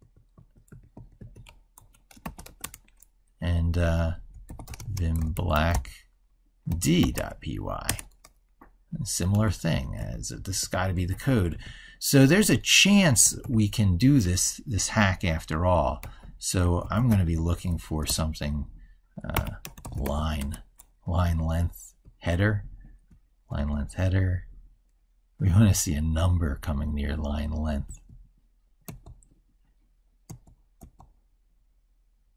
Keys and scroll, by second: 9.7 ctrl+f.